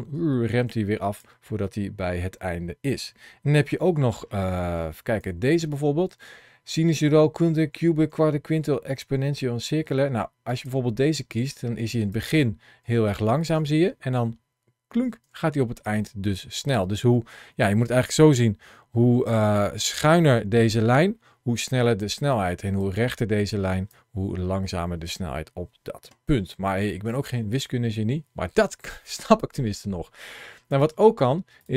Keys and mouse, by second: 4.4 middle click, 5.0 t, 11.9-13.4 drag, 13.4 space, 15.1 space, 15.7 click, 18.8 ctrl+shift+l.